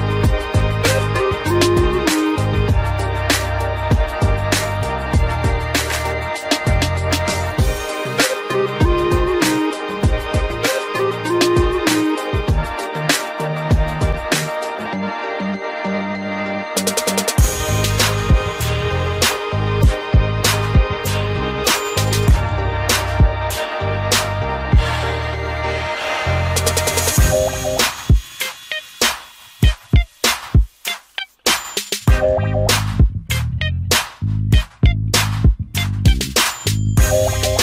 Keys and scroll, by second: 12.6 ctrl+g, 13.6 ctrl+alt+shift+e.